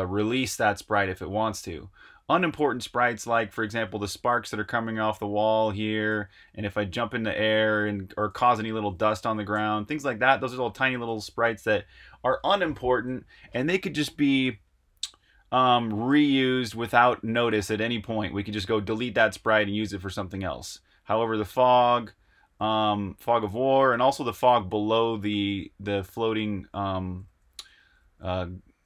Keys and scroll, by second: 2.2-11.0 typing, 16.7-17.4 typing, 21.2-28.8 typing.